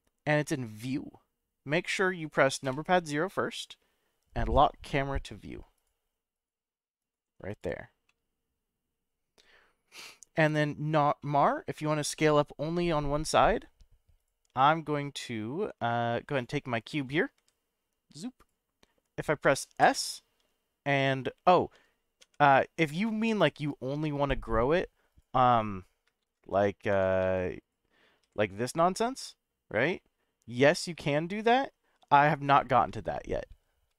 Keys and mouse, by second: 2.6 KP_0, 5.7 click, 6.3 click, 7.5-8.1 drag, 8.1-8.6 middle drag, 11.2-11.8 middle drag, 12.1-12.8 middle drag, 14.2 click, 17.4 g, 18.4 click, 19.8 s, 22.2 y, 25.1 click, 26.2 ctrl+z, 26.9 Tab, 27.2 3, 27.6 click, 28.2 g, 30.9 x, 32.4 right click, 33.0 ctrl+z.